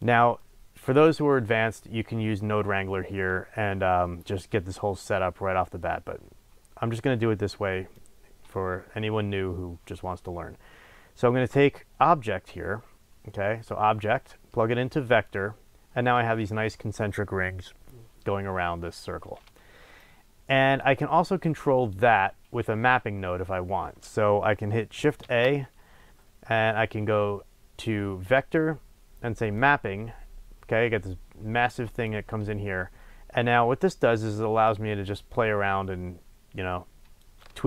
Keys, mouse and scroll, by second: 0.4 click, 8.0-14.1 drag, 19.9 click, 21.4 click, 25.2 shift+a, 32.0 click, 34.7-37.6 drag.